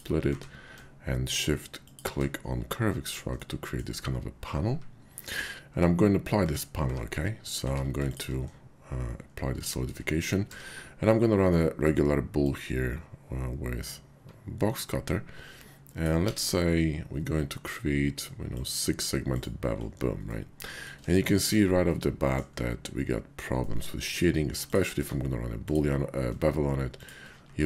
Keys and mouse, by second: 0.2 q, 3.1 click, 3.4-3.8 drag, 4.6-7.6 typing, 9.7 shift+click, 10.4 d, 12.5-16.0 drag, 16.2 b, 18.6 click, 19.3 click, 20.2-20.8 middle drag, 21.1 shift+drag, 21.4 KP_5, 21.9-22.3 drag, 23.5 drag, 24.0 click, 24.5 click, 24.9 q, 27.0 shift+click, 27.4 q.